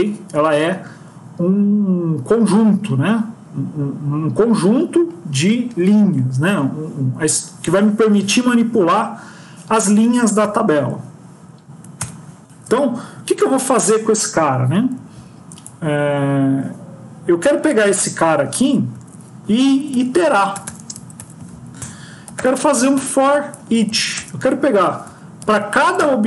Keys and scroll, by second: 11.9 shift+Home, 17.2 Home, 18.8 ctrl+Right, 19.6 Left, 19.8 Left, 21.0 End, 23.6 Down.